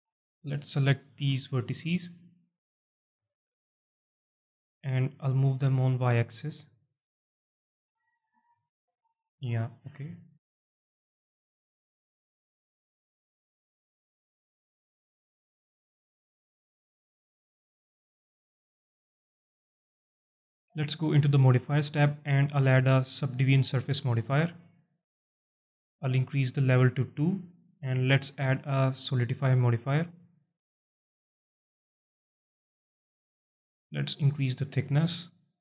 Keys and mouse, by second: 0.9 click, 1.5 shift+click, 1.9 shift+click, 2.2 alt+click, 2.7 alt+shift+click, 3.2 click, 4.0 alt+middle click, 4.7 alt+middle click, 6.3-8.1 drag, 8.4 alt+middle click, 8.7 alt+click, 9.0 alt+middle click, 9.4-13.1 alt+drag, 13.5-16.6 alt+drag, 16.8 Tab, 17.3 alt+shift+drag, 17.9-20.2 alt+drag, 20.9 click, 21.4-24.0 drag, 26.6 click, 27.6 click, 28.1-29.6 drag, 30.2-30.6 alt+middle drag, 30.6 alt+click, 31.0 alt+shift+drag, 31.5 alt+drag, 32.0 alt+shift+drag, 32.5 alt+click, 33.8-35.6 drag.